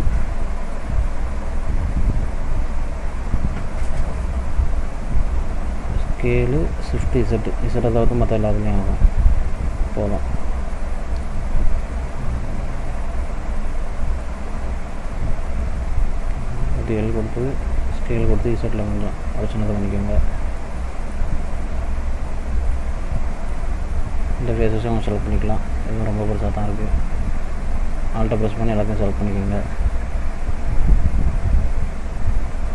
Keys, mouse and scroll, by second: 0.3 scroll down 2, 0.8 middle click, 2.0 scroll up 1, 2.9 ctrl+z, 4.1 middle click, 6.5 s, 10.4 click, 10.8 middle click, 11.8 scroll down 1, 12.2 middle click, 13.2 scroll down 1, 13.6 middle click, 15.6 l, 16.3 middle click, 17.8 s, 20.8 middle click, 21.3 click, 21.7 middle click, 23.2 middle click, 23.8 scroll up 1, 26.4 alt+click, 28.5 alt+shift+click, 28.6 alt+shift+click.